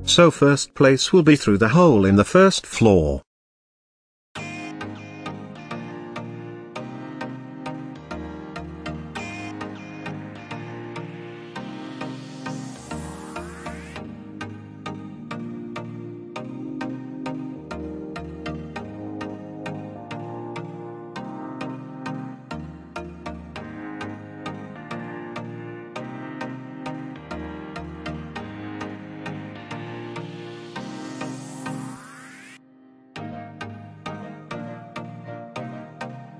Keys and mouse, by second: 3.9 KP_7, 4.7 z, 5.3 shift+drag, 6.4 g, 6.8 shift+z, 8.8 click, 9.9-10.3 middle drag, 10.5 shift+middle click, 10.9 z, 11.3 middle click, 11.5 shift+middle drag, 12.2 drag, 13.0-13.5 middle drag, 14.1 g, 14.3 z, 15.5 click, 16.1 g, 16.3 x, 18.2 click, 18.6-19.6 middle drag, 20.0-20.3 middle drag, 20.3-20.7 shift+middle drag, 21.0 g, 21.2 y, 22.2 click, 22.4-22.9 middle drag, 23.2 s, 25.1 drag, 25.5 middle click, 26.1 g, 26.2 y, 27.2 click, 27.7 middle drag, 28.4 shift+middle click, 28.9 middle click, 29.7 shift+middle drag, 30.1-30.8 middle drag, 31.4 s, 32.5 click, 32.8 middle click, 33.5 s, 34.4 click, 34.6 r, 34.8 z, 36.1 KP_1, 36.3 KP_8.